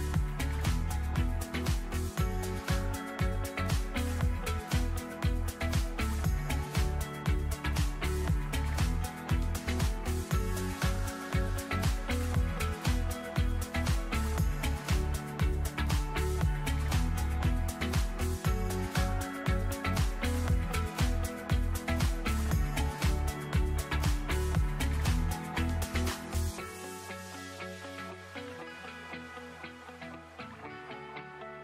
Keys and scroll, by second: 2.9 space, 3.3 ctrl+z, 5.1 space.